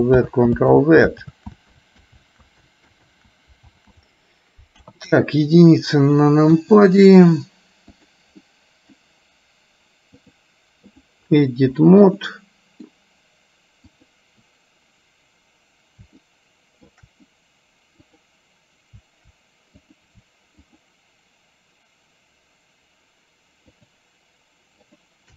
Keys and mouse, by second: 0.4 ctrl+z, 0.9 ctrl+z, 1.5 ctrl+z, 2.0 ctrl+z, 2.4 ctrl+z, 2.9 ctrl+z, 3.2 ctrl+z, 3.9 ctrl+z, 4.9 KP_1, 6.6 KP_1, 8.1 click, 8.6 middle click, 10.4-11.4 drag, 12.2 middle click, 14.0 click, 16.4 shift+middle click, 18.1 click, 20.0 click, 20.7 shift+click, 23.7 shift+click, 25.0 shift+click.